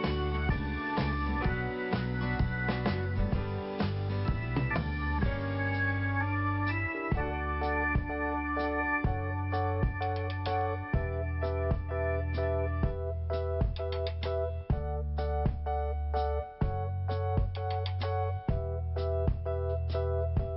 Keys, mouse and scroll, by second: 1.0 click, 2.5 click, 5.5 click, 6.1 click, 9.4 click, 10.7 click, 12.8 click, 13.8 click, 15.9 click, 16.0 click, 17.0 scroll down 2, 18.8 p, 20.4 click.